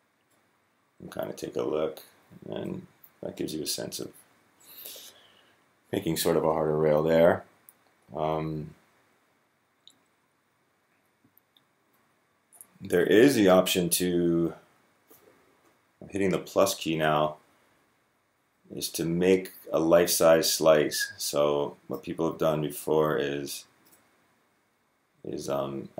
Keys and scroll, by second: 22.2 Left, 22.4 Left, 22.5 Left, 22.7 Left, 24.4 Left, 24.6 Left, 25.3 Left, 25.6-25.9 Left.